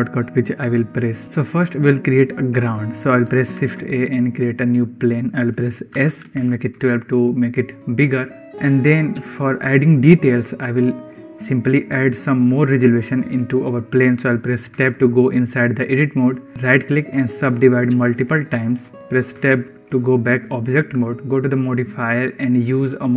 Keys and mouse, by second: 1.1 shift+middle click, 3.4 shift+a, 5.9 s, 7.1-8.3 middle drag, 8.4 shift+middle click, 13.4 middle click, 14.8 Tab, 16.5 click, 17.0 click, 17.3 click, 17.8 click, 18.5 click, 19.2 Tab, 21.5 click, 22.6-23.1 drag.